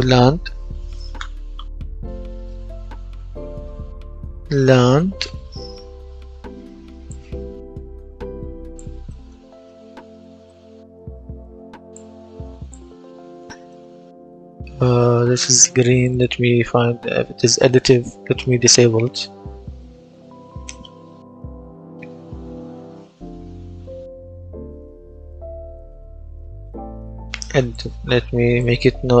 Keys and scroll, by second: 2.1 F10, 3.5-5.5 typing.